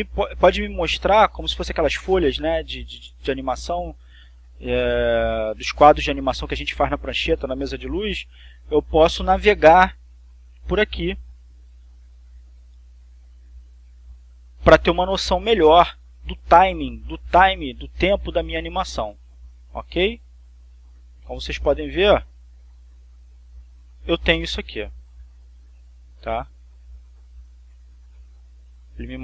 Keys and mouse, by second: 26.9 click.